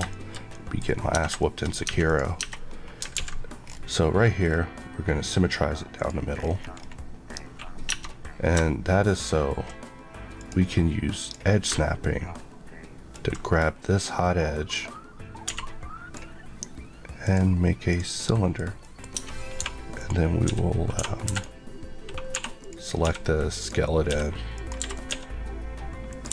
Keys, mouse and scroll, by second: 0.0 shift+middle click, 0.2 shift+middle click, 0.4 middle click, 0.7 scroll up 1, 1.2 shift+Tab, 1.3 shift+middle click, 1.7 scroll up 1, 2.0 click, 2.3 Tab, 2.5 scroll up 1, 3.1 alt+x, 3.6 scroll down 1, 4.2 scroll down 1, 5.9 click, 6.3 scroll up 1, 7.8 Tab, 10.3 click, 11.6 ctrl+click, 13.0 ctrl+click, 13.4 click, 15.4 a, 17.2 click, 17.8 click, 18.2 middle click, 19.0 scroll up 1, 19.1 Tab, 19.5-20.9 typing, 19.9 click, 21.2 Escape, 21.2 right click, 22.2-25.0 typing, 22.5 click, 23.5 click, 24.4 click, 24.9 right click, 26.0 click.